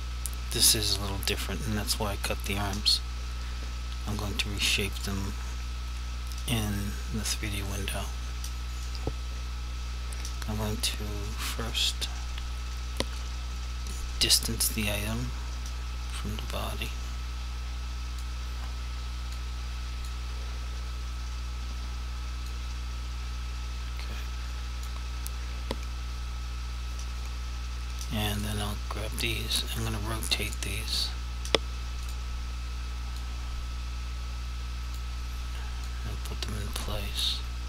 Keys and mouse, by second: 5.0 click, 13.2 click, 16.8 click, 19.4 click, 22.6 click, 28.4 click, 30.5 shift+click, 33.3 click, 35.9 click.